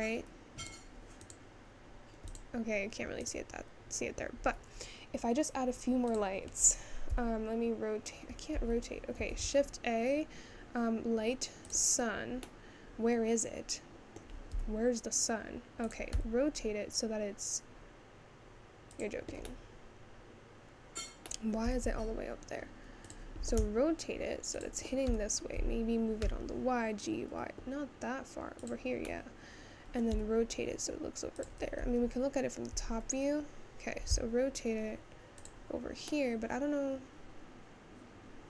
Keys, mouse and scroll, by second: 0.8 click, 4.8-5.9 scroll down 6, 7.0 click, 11.9 shift+a, 13.2-15.1 middle drag, 15.1 g, 20.9-23.9 middle drag, 23.9 r, 27.1 g, 30.9 r.